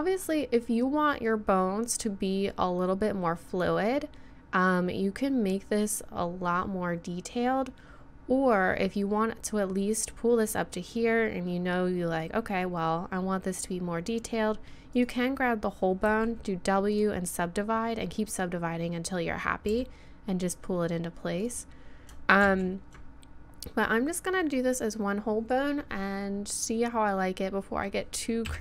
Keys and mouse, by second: 12.3-15.0 middle drag, 15.0-16.8 drag, 16.1 w, 19.7 g, 22.5 ctrl+z, 28.5 KP_7.